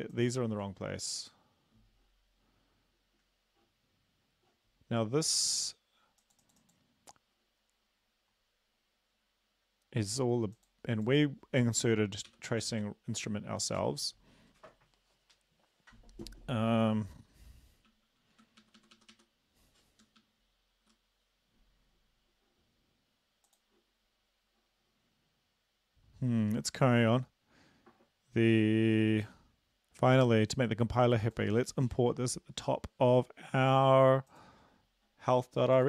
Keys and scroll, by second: 12.3 ctrl+/, 12.6 ctrl+s, 18.3 Home, 18.6 Right, 18.8 Right, 19.0 Right, 19.1 Right, 20.0 Up, 20.2-20.9 Up.